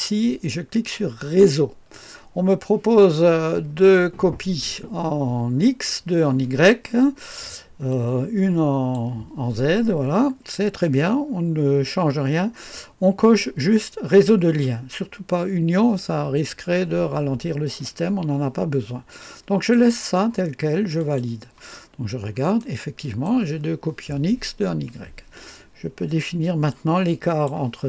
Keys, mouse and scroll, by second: 7.9-9.6 drag, 19.1-20.2 drag, 20.9 click, 21.8-22.6 scroll down 2, 22.6-24.0 right drag, 26.7-27.8 drag.